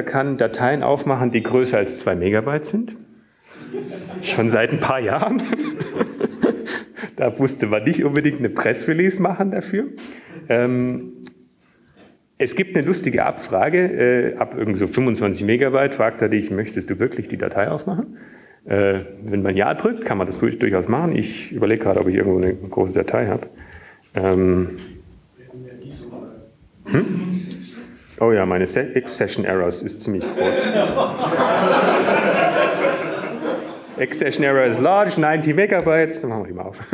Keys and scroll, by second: 6.8 Up, 12.5 BackSpace, 13.6 Up, 27.5 BackSpace, 28.5 Down, 29.0-29.6 typing, 30.6-32.2 typing, 34.8 typing.